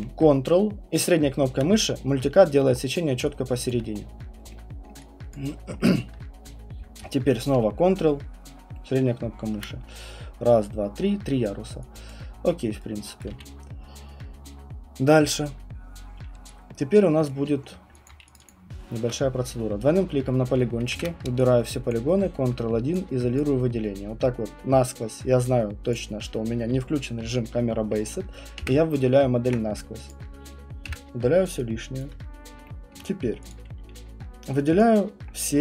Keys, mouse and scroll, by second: 1.1 ctrl+middle click, 2.7 middle click, 2.8 middle click, 2.8 middle click, 2.9 ctrl+middle click, 3.7 alt+click, 3.9 middle click, 4.8 alt+middle click, 5.3 alt+click, 6.0 alt+middle click, 8.9 ctrl+middle click, 12.1 alt+click, 12.5 middle click, 13.3 right click, 13.3 q, 17.3 alt+click, 17.8 alt+middle click, 18.0 click, 18.4 click, 18.5 click, 20.9 ctrl+1, 21.9 alt+click, 22.4 alt+middle click, 23.4 click, 25.9 click, 28.6 Delete, 30.1 click, 30.8 Delete, 32.0 alt+click, 32.2 scroll, 32.9 alt+middle click, 33.5 click, 34.2 middle click, 34.2 middle click, 34.8 click.